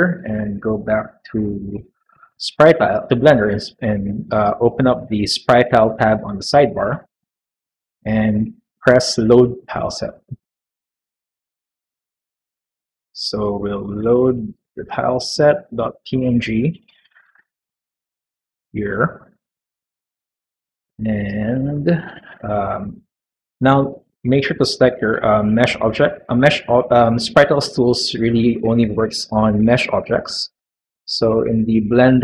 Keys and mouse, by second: 2.2 middle click, 3.0-4.2 middle drag, 10.1 click, 19.9-21.5 middle drag, 21.9 middle click, 23.5-24.2 middle drag.